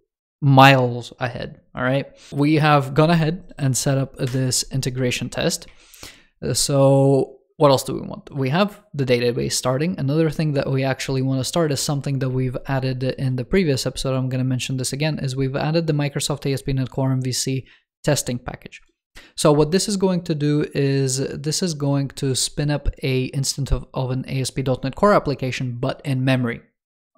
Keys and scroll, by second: 5.5 super+3.